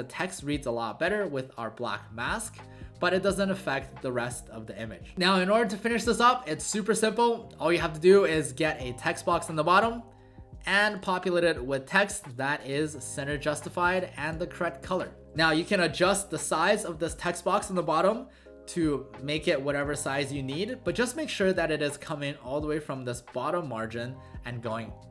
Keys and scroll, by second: 0.1 w, 5.1-6.0 typing, 13.2 ctrl+a, 15.3 ctrl+z, 16.1 alt+space.